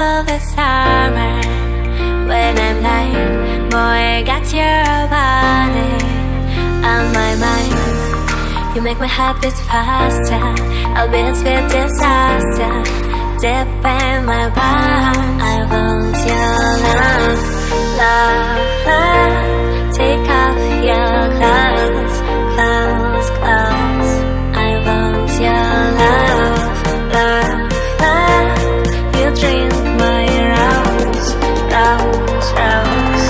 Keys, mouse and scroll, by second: 1.6 click, 2.7 click, 5.7 click, 7.6 click, 8.3 click, 11.5 click, 13.1 click, 14.7 click, 16.8 click, 17.6 click, 18.3 click, 19.3 click, 22.4 click, 24.1 click, 25.9 click, 27.9 click, 29.2 click, 29.4 click, 30.9 click, 31.1 click, 32.2 click.